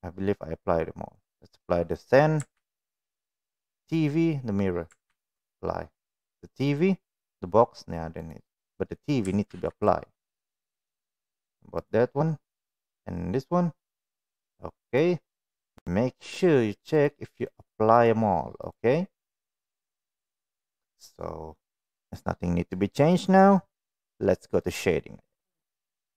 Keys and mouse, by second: 2.5 ctrl+a, 3.4 click, 5.0 ctrl+a, 8.2 click, 9.4 ctrl+a, 10.7 click, 11.3 click, 11.7 click, 12.9 click, 13.8 click, 15.5 click, 16.3 click, 16.9 click, 17.4 click, 18.5 click, 19.2 click, 19.7 click, 20.7-23.4 middle drag, 24.6 click.